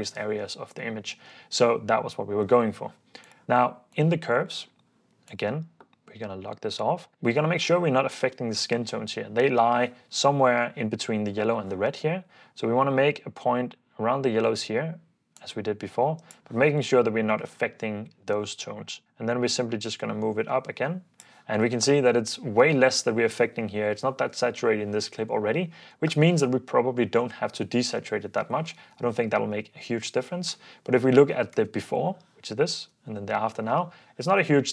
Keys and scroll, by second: 22.2 super+d, 28.4 super+d, 29.4 super+f, 31.6 super+d, 33.9 ↺.